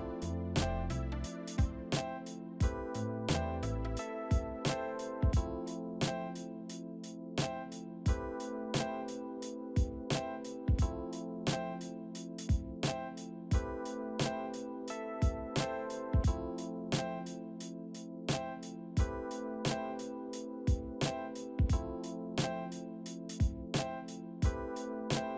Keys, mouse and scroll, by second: 6.8 w, 7.9 shift+click, 9.8 e, 10.4 middle click, 11.2 right click, 12.2 a, 13.4 a, 13.9 w, 15.8 c, 24.7 double click, 24.9-25.3 typing.